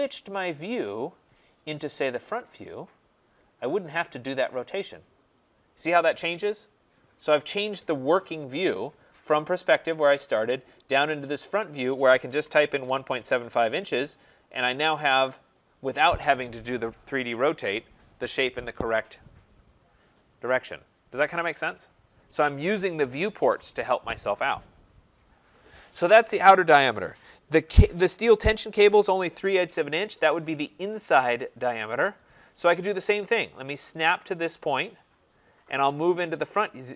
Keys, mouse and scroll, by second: 0.8-1.3 scroll down 6, 1.3-2.9 scroll, 3.3-4.3 scroll, 4.3-4.9 scroll down 7, 7.2-7.8 scroll down 5, 8.1 scroll up 3, 8.3 scroll, 11.9-13.4 typing, 13.5 Return, 15.6 click, 32.2 click, 34.0 click.